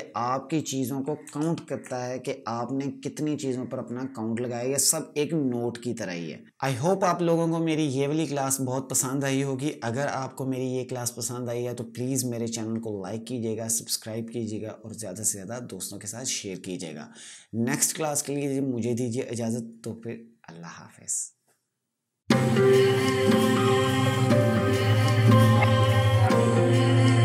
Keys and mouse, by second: 1.3 ctrl+KP_Subtract.